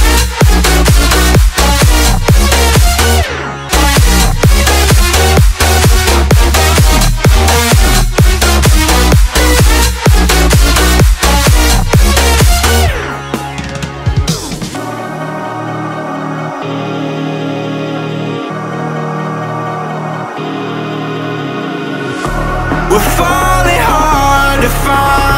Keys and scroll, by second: 0.8 Return, 1.2 Up, 3.2 space, 5.0 space, 12.0 v, 16.4 Return, 19.3 ctrl+j, 21.7 space.